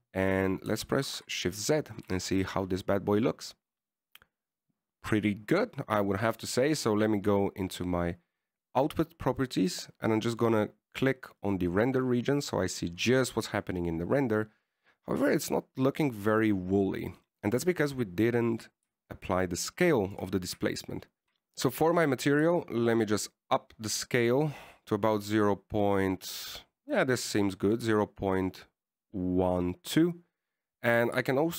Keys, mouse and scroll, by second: 2.0 shift+z, 2.8 shift+z, 3.3 a, 7.3 click, 12.7 click, 15.5 scroll up 2, 17.5 right click, 18.5 middle click, 19.0-20.1 scroll up 4, 20.2 shift+click, 21.2-23.6 scroll down 10, 23.8 click.